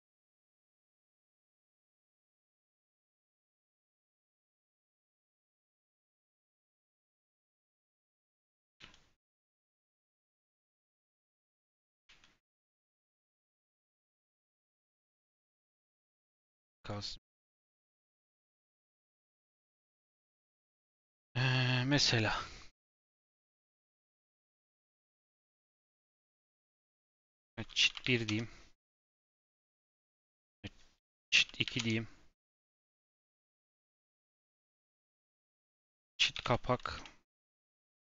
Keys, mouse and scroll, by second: 0.2 shift+click, 0.5 shift+d, 2.2 shift+click, 2.5 shift+click, 2.9-4.0 middle drag, 4.0 KP_Decimal, 4.4-4.7 scroll down 5, 6.7-7.1 scroll down 7, 7.2 middle click, 7.9-8.5 scroll up 7, 8.5 g, 10.5 g, 12.0 s, 13.9 click, 14.6 s, 15.7 ctrl+z, 16.0-16.7 scroll down 6, 16.8 click, 17.0 scroll down 2, 17.2-18.2 middle drag, 18.2 scroll up 1, 18.4-19.5 shift+middle drag, 19.5 KP_7, 24.4 click, 26.8 F2, 30.0 click, 30.4 F2, 34.8 click, 35.2 F2, 37.4 BackSpace.